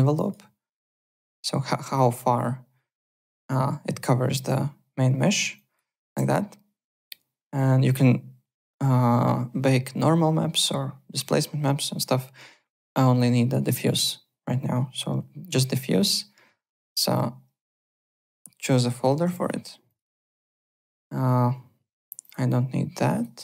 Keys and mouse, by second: 0.1 alt+click, 0.9 click, 5.5 alt+click, 5.8 alt+right click, 16.0 click, 17.8 click, 18.6 click, 18.8 a, 19.4 click, 22.2 click, 23.1 click.